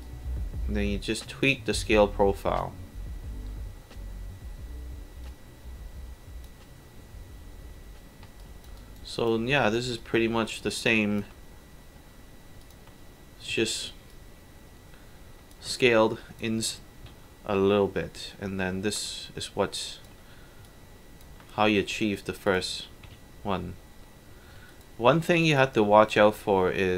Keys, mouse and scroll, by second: 0.0-1.5 alt+drag, 5.2 click, 8.4 alt+click, 8.8 alt+right click, 9.1 alt+click, 10.0-11.2 drag, 12.6 alt+click, 14.1-15.5 alt+drag, 15.8-16.4 alt+drag, 19.2-20.0 alt+drag, 20.7-21.2 drag, 22.5 alt+click, 23.1 alt+w, 24.4 scroll up 2, 24.7 alt+click, 25.0 alt+middle drag, 25.4 alt+right click, 25.8 alt+drag, 26.3 alt+middle drag.